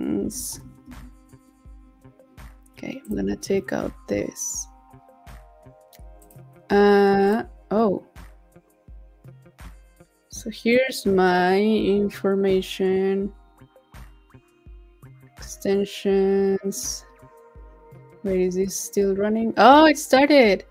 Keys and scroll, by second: 0.5 super+,.